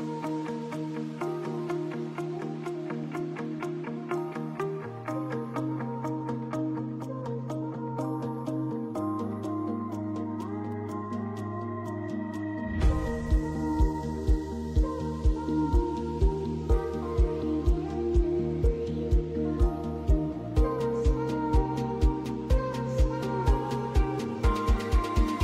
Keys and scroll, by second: 1.1 F4, 4.6 shift+F2, 4.9 Escape, 5.7 F2, 8.7 F2, 11.2 Escape, 13.6 c, 15.2 F3, 17.3 shift+Page_Up, 17.9 shift+F2, 18.3 Escape, 22.3 F3.